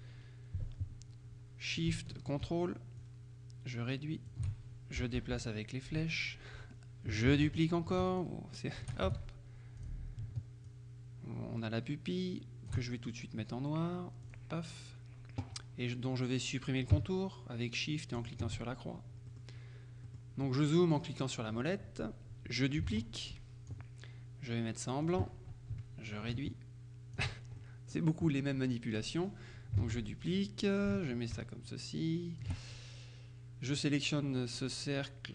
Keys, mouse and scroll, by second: 3.1-4.8 ctrl+shift+drag, 5.1 Down, 7.4 ctrl+d, 8.2-9.5 shift+drag, 9.1 shift+z, 9.9 click, 10.8-13.3 ctrl+shift+drag, 14.3 click, 18.3 shift+click, 19.4 middle click, 20.1 middle click, 22.9 ctrl+d, 23.0-24.2 ctrl+drag, 25.1 click, 26.4-27.8 ctrl+shift+drag, 29.9 ctrl+d, 30.2-31.3 ctrl+drag, 31.4-33.0 ctrl+shift+drag, 33.8 click.